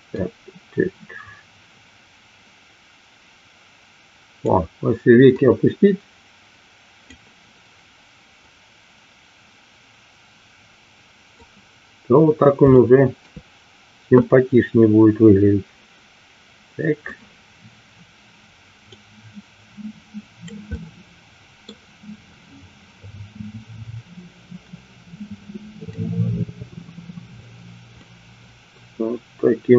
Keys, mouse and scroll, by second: 0.3-4.6 drag, 5.5-7.2 drag, 8.5-11.3 drag, 12.7 shift+middle click, 14.0-17.0 middle drag, 18.9-20.5 drag, 20.7-21.7 middle drag, 23.0 middle click, 26.0-27.4 drag, 27.9 middle click.